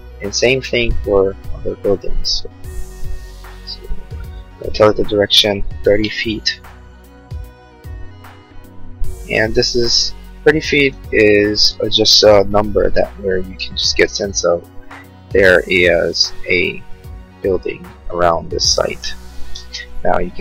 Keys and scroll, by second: 4.2-5.6 typing, 11.2-12.3 typing, 12.9 Return, 17.8-18.7 typing.